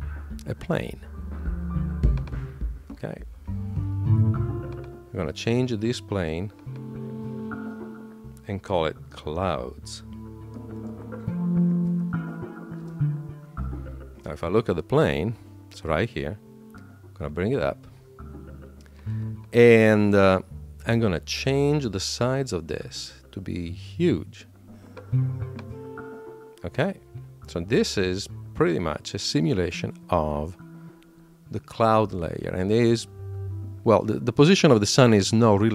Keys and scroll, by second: 8.9 shift+c, 12.7 Return.